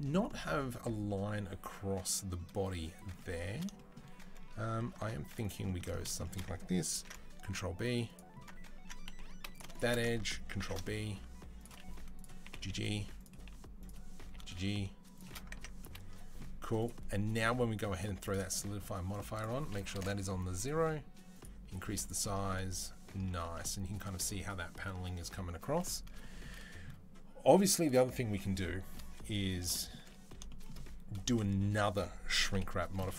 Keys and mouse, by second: 0.1-3.5 middle drag, 3.5 shift+click, 3.8 middle click, 4.7 ctrl+click, 4.9 ctrl+r, 5.1-7.9 shift+middle drag, 6.8 ctrl+b, 7.9 click, 8.2 middle click, 8.3 ctrl+click, 8.7 middle click, 9.0 2, 9.3 alt+shift+click, 9.7 middle click, 9.9 ctrl+click, 10.4 ctrl+b, 10.5 middle click, 10.6 shift+click, 11.5-12.5 middle drag, 12.3 g, 12.5 shift+click, 13.3 middle click, 13.7 click, 14.1-16.7 shift+middle drag, 14.1 g, 15.4 Tab, 16.7-21.9 drag, 21.9-23.4 middle drag, 25.9-26.3 shift+middle drag, 29.5-29.9 shift+middle drag, 30.2 shift+middle drag, 32.4 KP_7.